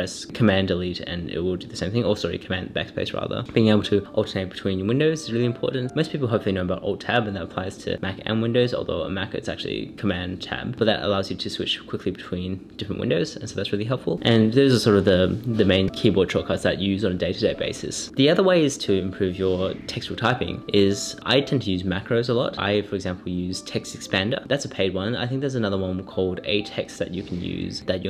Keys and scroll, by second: 0.4 super+Up, 0.8 super+Right, 1.5 super+BackSpace.